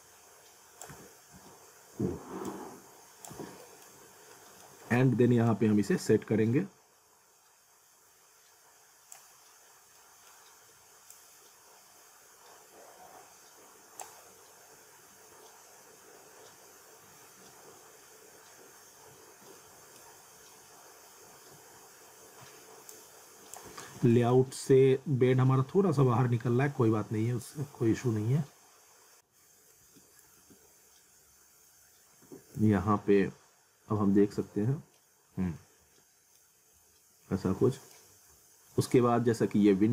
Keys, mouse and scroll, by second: 0.9-1.3 typing, 2.5 click, 3.3 w, 3.6 middle click, 4.1 scroll up 1, 4.3 middle click, 5.5 click, 9.4-9.7 scroll down 1, 10.0 middle click, 11.1 click, 14.2 scroll down 1, 15.5-15.9 scroll up 1, 19.6 middle click, 20.2 scroll down 1, 21.4-21.8 scroll up 1, 22.9 click, 24.3 ctrl+z, 26.3 scroll up 1, 27.4 click, 29.2-29.8 scroll up 1, 29.8 z, 30.4 alt+w, 32.1-33.1 typing, 33.7 scroll up 1, 34.4 middle click, 35.0-35.4 scroll down 1, 35.6 alt+middle click, 36.6 scroll up 1, 36.8 alt+middle click, 38.1 scroll down 1, 38.7 middle click, 39.7 middle click.